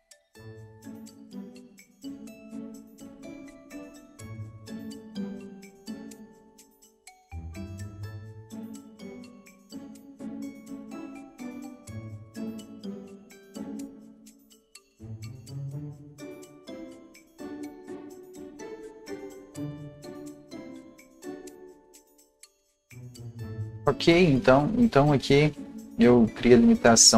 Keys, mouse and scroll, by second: 0.0 click, 0.5 click, 0.7 KP_Subtract, 0.8 KP_3, 0.9 Tab, 0.9 KP_5, 1.3 KP_Enter, 1.6-3.0 right drag, 1.8 click, 3.0-5.3 drag, 5.0 ctrl+z, 5.3 click, 5.8 KP_Subtract, 5.9 KP_3, 5.9 Tab, 5.9 KP_5, 6.5 Return, 6.5 click, 7.1 click, 8.0 ctrl+z, 8.0 right click, 8.1 scroll up 1, 8.3 right click, 8.6 click, 9.7 ctrl+z, 10.0-12.8 drag, 13.4 scroll down 1, 14.1 click, 14.2-17.0 typing, 17.2 click, 18.2 KP_5, 18.7 KP_Enter, 19.1 click, 19.3-22.2 typing, 19.7 KP_Enter, 19.7 click, 22.2 click, 22.5 scroll down 1, 22.8 Home, 23.0-24.6 scroll up 1, 25.3-27.0 scroll up 1, 27.0-27.1 drag, 27.0-27.1 scroll down 1.